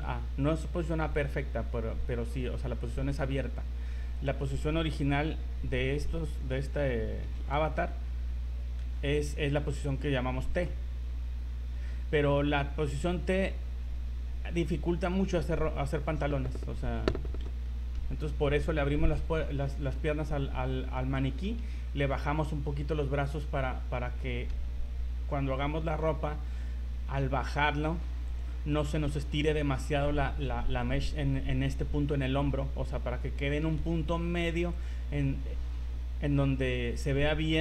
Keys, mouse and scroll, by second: 4.7 a, 5.0 a, 6.4 right click, 7.3 a, 7.6 a, 8.9 alt+r, 10.8 scroll down 1, 11.0-11.8 scroll up 1, 12.0 scroll up 2, 13.6 scroll up 3, 16.9-17.3 scroll down 4, 19.6 shift+middle click, 20.6 scroll up 4, 21.2 shift+middle click, 22.1 right click, 26.2 r, 33.8 r.